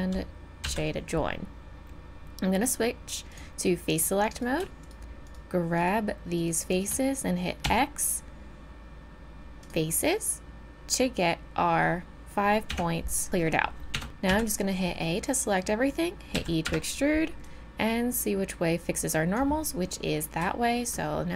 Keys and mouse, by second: 0.6 j, 1.8-3.3 middle drag, 4.3-6.5 drag, 7.6 x, 8.5-9.1 middle drag, 12.7 Tab, 13.9 Tab, 14.3 a, 15.1 middle click, 15.8-17.1 middle drag, 16.4 e, 17.4-19.3 drag, 20.5-21.3 middle drag.